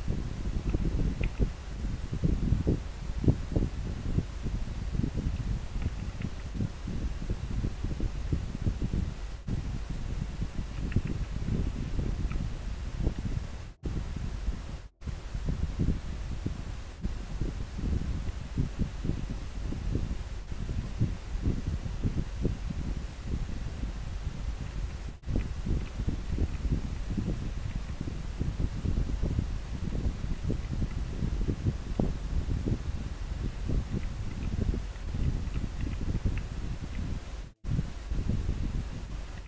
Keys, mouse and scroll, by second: 18.5-19.0 scroll up 1, 20.9 scroll down 1, 21.5 scroll up 1, 23.0 scroll up 1, 23.0-23.5 scroll down 1, 23.5-23.9 scroll up 1, 25.5 scroll down 1, 30.7 scroll up 1, 35.9 scroll down 1, 35.9 scroll up 1.